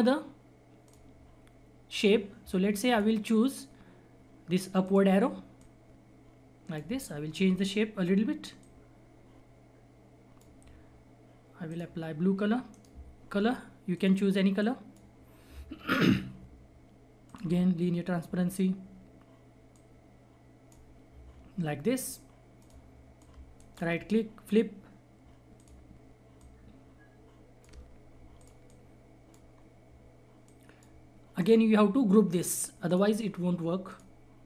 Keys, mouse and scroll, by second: 7.0-8.5 scroll up 1, 8.5-11.6 drag, 12.7 right click, 13.9-17.2 drag, 17.9 scroll up 1, 19.7-21.6 shift+drag, 21.6-21.9 scroll down 1, 22.6 click, 23.8 shift+right click, 25.5 click, 27.9-28.3 scroll down 1, 28.3 click, 29.5 scroll up 1, 30.4 click, 31.3 right click, 32.8 click.